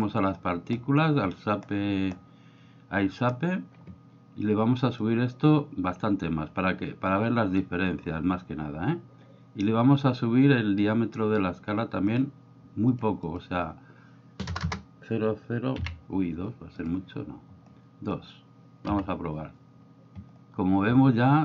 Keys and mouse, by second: 5.1-7.6 drag, 12.1 click, 12.9-16.8 drag, 14.6 BackSpace.